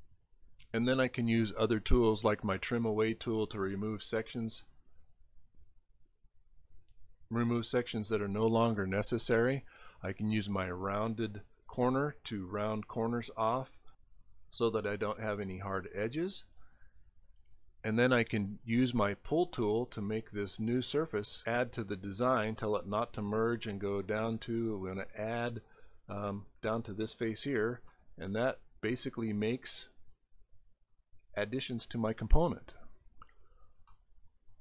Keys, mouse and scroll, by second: 0.2 click, 2.3 click, 4.3 click, 6.3 click, 10.3 click, 12.2 click, 13.2 click, 14.5 click, 16.0 click, 18.9 click, 21.1 click, 22.5 click, 24.0 click, 25.5 click, 26.6 click, 30.9 middle click, 33.9-34.6 middle drag.